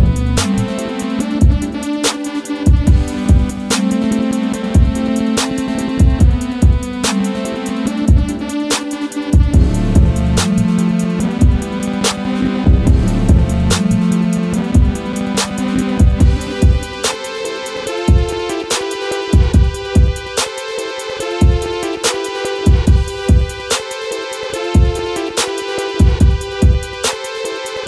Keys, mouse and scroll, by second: 1.8 click, 6.4 scroll down 1, 7.6 scroll down 1, 9.2-15.5 drag, 15.5-26.9 drag, 26.9 right click.